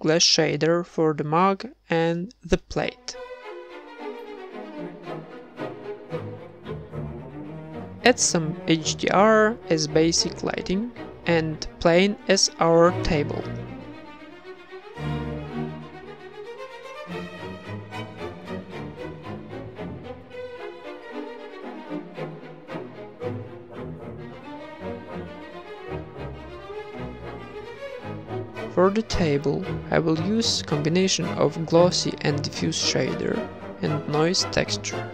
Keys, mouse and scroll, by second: 0.6 ctrl+s, 1.9 z, 2.7 ctrl+s, 2.7 z, 3.6 z, 3.8 shift+a, 4.9 alt+g, 5.3 s, 9.0 z, 14.5 click, 16.0-20.7 drag, 22.6 click, 25.0-26.2 drag, 28.7-29.9 drag, 30.1 KP_0, 30.3 ctrl+v, 30.5 shift+a, 33.9 shift+a.